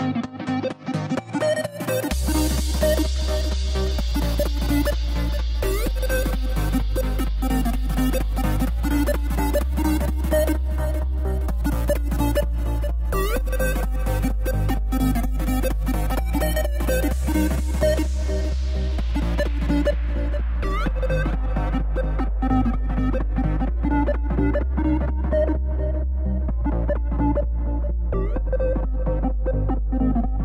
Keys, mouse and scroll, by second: 2.6-3.8 middle drag, 3.8 ctrl+z, 4.0 ctrl+z, 4.5 Tab, 5.3 x, 5.8 KP_1, 7.3 shift+a, 8.0 s, 12.7 KP_3, 13.9 click, 14.2 click, 14.4 Tab, 15.0 ctrl+r, 20.3 click, 20.7-21.8 middle drag, 21.8 click, 22.9 shift+click, 23.8 click, 24.8 KP_3, 25.9 click.